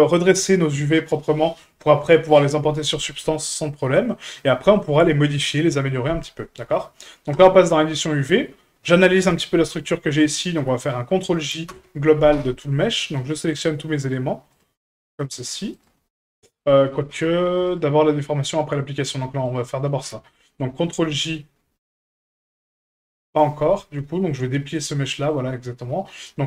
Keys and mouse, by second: 4.1 middle drag.